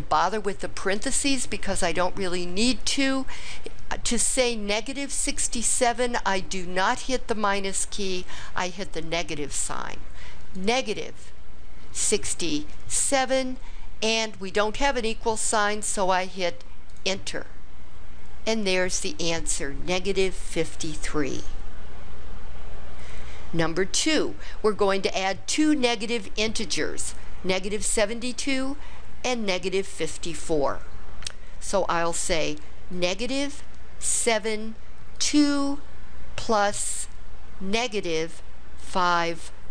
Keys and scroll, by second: 10.5 -, 11.9 6, 12.9 7, 16.9 Return, 34.1 7, 35.1 2, 38.8 5.